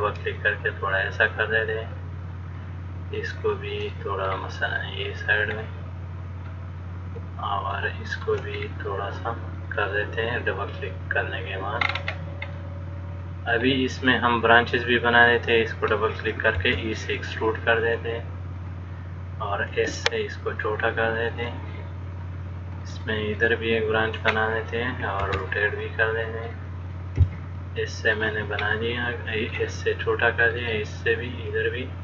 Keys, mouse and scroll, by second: 4.2 click, 4.2 middle click, 5.0 click, 5.8 middle click, 8.0 shift+middle click, 8.8-9.8 scroll down 1, 9.8 click, 9.8 scroll down 1, 10.0 click, 12.1-12.7 scroll up 2, 12.7 scroll up 2, 12.8 middle click, 15.4 click, 16.8 click, 16.8 e, 19.9 s, 23.0 click, 23.6 click, 23.6 middle click, 24.6-25.2 scroll down 1, 25.5 e, 27.4 s, 28.9 middle click, 30.7 click, 31.0 click.